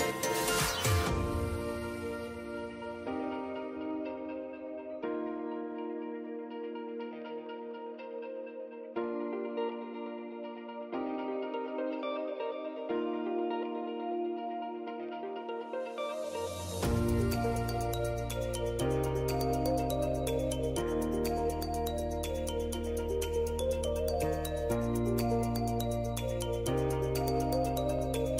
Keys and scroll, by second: 9.8 ctrl+z, 11.6 ctrl+j.